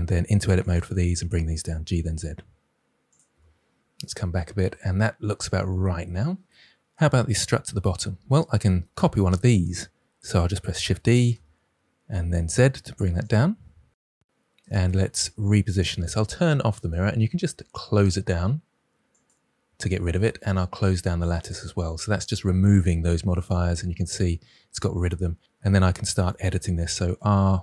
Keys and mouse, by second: 0.1 Tab, 1.5 g, 1.8 z, 3.0 click, 3.2 Tab, 10.9 shift+d, 11.3 z, 19.1 click, 21.2 click, 26.2 r.